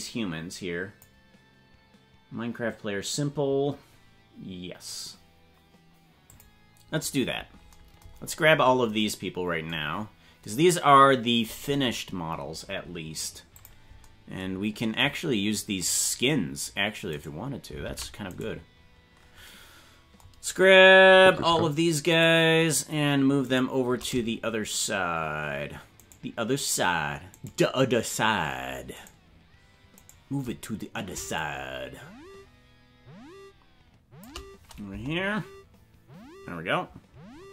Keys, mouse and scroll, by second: 0.0 click, 6.4 click, 7.5 scroll down 1, 8.2-8.6 scroll down 11, 10.0 scroll up 4, 13.6 click, 17.1 right click, 17.9 ctrl+Tab, 18.4 right click, 22.2 shift+right click, 23.5 shift+right click, 26.2 shift+right click, 27.5 shift+right click, 29.1 shift+right click, 30.2 shift+right click, 31.4-34.3 shift+drag, 34.9 KP_0.